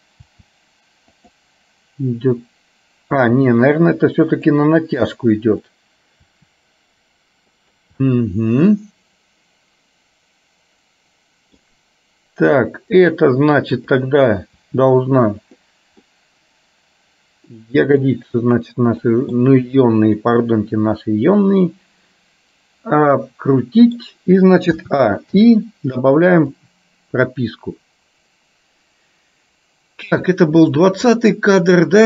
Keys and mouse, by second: 3.2 r, 5.6 click, 6.5 r, 8.1-11.7 middle drag, 12.6 click, 14.0 click, 14.7 r, 16.1-18.1 middle drag, 19.1 middle click, 20.2-24.1 middle drag, 25.5 i, 26.7-31.0 drag, 31.2-32.0 middle drag.